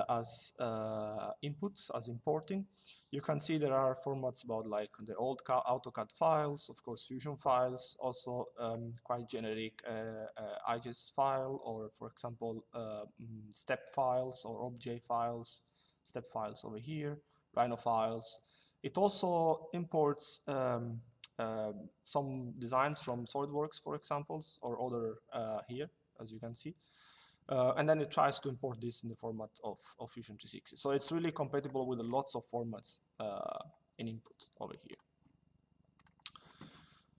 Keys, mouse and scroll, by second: 34.6 click.